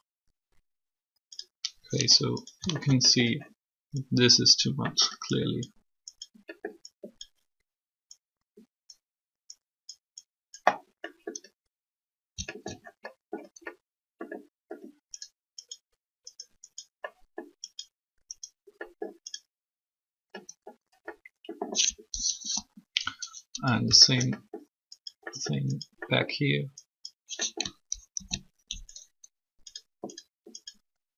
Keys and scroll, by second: 1.1 i, 22.4 3, 28.1 ctrl+z.